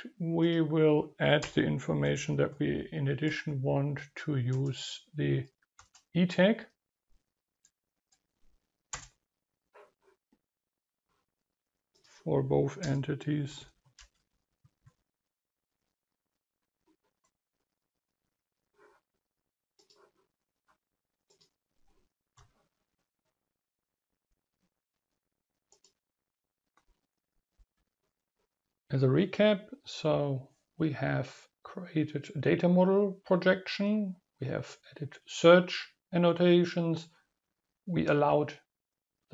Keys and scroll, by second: 1.6 ctrl+space, 19.5 Delete.